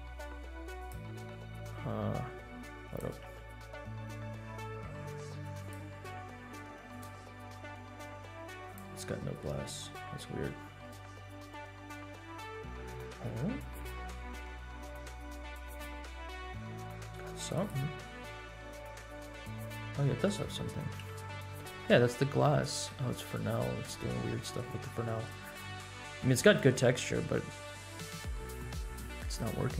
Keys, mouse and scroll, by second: 0.0 g, 0.9 click, 1.1-2.1 scroll down 4, 2.4 scroll down 1, 2.8-3.3 drag, 4.2 Tab, 4.3 middle click, 5.6 click, 5.9 scroll up 2, 6.8 click, 7.5 middle click, 8.6 click, 9.0 middle click, 10.3 Tab, 11.2 Tab, 14.2 Tab, 14.6-15.8 middle drag, 16.0-16.4 shift+middle drag, 17.4 Tab, 17.6 click, 18.3-19.6 middle drag, 20.0 shift+middle click, 21.0 KP_Decimal, 23.7 Tab, 24.5-25.3 middle drag, 25.5-25.8 scroll up 2, 25.9-26.2 shift+middle drag, 26.4 middle click, 29.3 click.